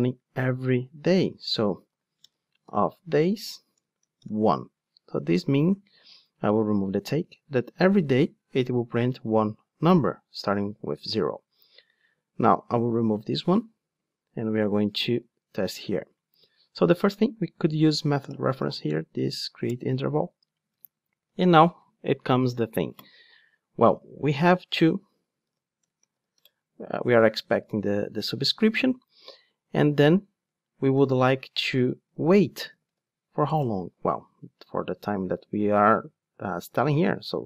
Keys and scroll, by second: 3.0 Return, 6.0 super+x, 12.9 super+x, 19.6 Return, 26.5 Return, 34.4 Return.